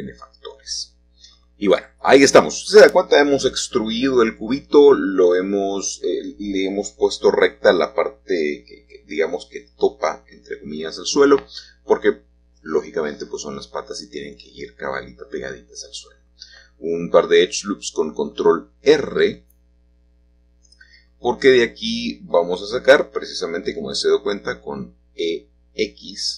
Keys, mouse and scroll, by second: 0.1 click, 1.0-1.4 scroll up 1, 2.1-3.6 middle drag, 5.1-6.6 shift+middle drag, 6.8-7.4 scroll down 2, 8.3 middle click, 10.1 middle click, 12.2-13.5 scroll down 1, 13.5 scroll down 1, 15.5-16.6 drag, 19.2-20.3 drag, 20.6 3, 21.8 click, 22.8 e, 25.2 x.